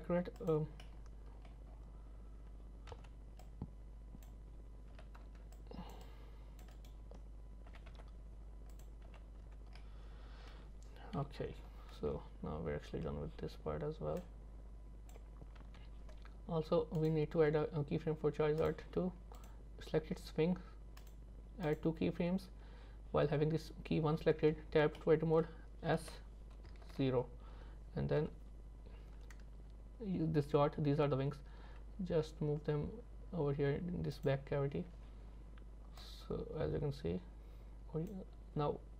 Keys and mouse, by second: 0.9 middle click, 2.9 z, 3.6 middle click, 5.0 c, 7.7 g, 9.1 z, 9.4 Tab, 9.8 middle click, 11.2 KP_3, 14.3 click, 15.6 z, 18.7-20.7 drag, 21.0 click, 21.7 click, 24.4 Tab, 25.0 middle click, 26.0 s, 28.2 KP_3, 31.7 g, 34.8 Tab, 36.1-38.2 drag.